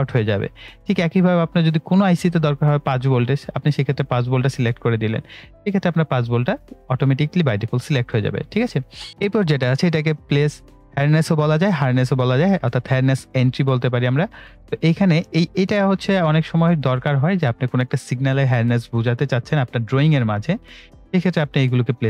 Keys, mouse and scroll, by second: 0.4 right click, 1.4-3.4 drag, 8.0 right click.